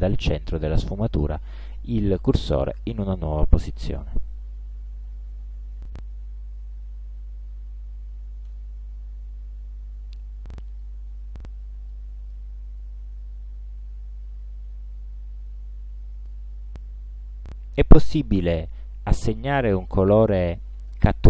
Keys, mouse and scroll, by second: 8.5 space, 10.7 click, 12.0-12.6 drag, 12.8 ctrl+scroll down 2, 13.2 ctrl+scroll up 2, 16.3 click.